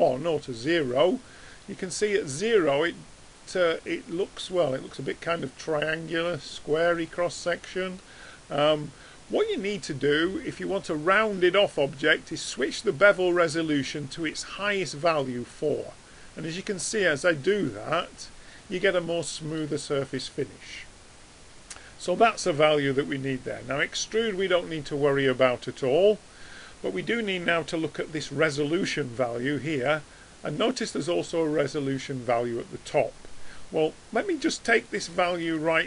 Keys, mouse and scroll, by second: 0.8-1.6 middle drag, 1.6 middle click, 1.8 middle click, 2.0-2.5 middle drag, 9.3-14.1 middle drag, 15.6-16.4 middle drag, 16.6 middle click, 18.4 middle drag, 18.6 middle click, 34.3 click, 34.6 click, 35.2 click, 35.6 click.